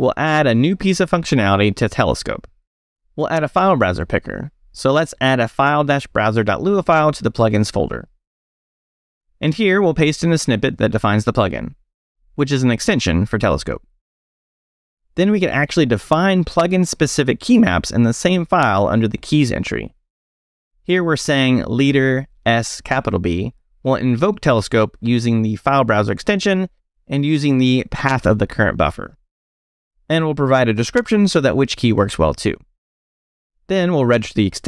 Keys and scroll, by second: 0.0 j, 0.4 Return, 1.1 j, 1.6 Return, 4.9-8.2 typing, 9.6 e, 10.7 i, 11.6 super+v, 12.5 super+Escape, 14.5 Escape.